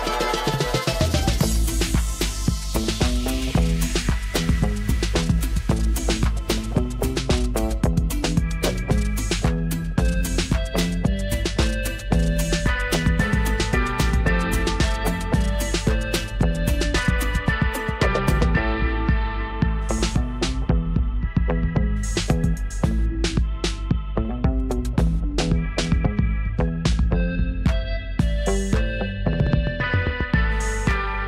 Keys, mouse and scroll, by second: 18.4 space, 18.8 click, 18.9-19.4 space, 19.4 space, 19.8-20.4 drag.